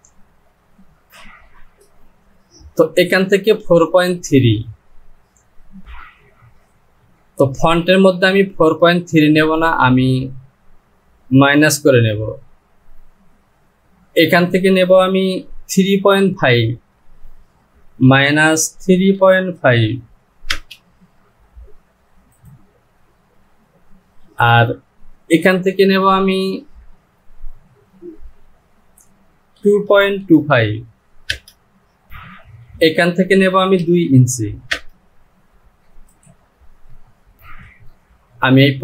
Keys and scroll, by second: 19.3 KP_Decimal, 20.7 Return, 29.0 Down, 31.5 Return, 33.0 Down, 35.0 Return.